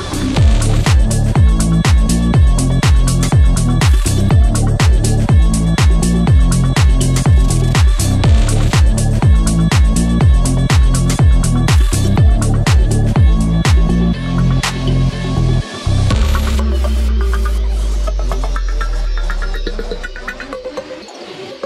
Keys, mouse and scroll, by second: 1.6 click, 1.9-2.7 scroll up 1, 2.7 click, 4.1 click, 4.6 right click, 4.8 click, 6.3-8.8 drag, 9.5 scroll up 1, 10.1 click, 13.6-17.1 drag, 17.1 click, 18.1-21.3 drag, 21.3 ctrl+click.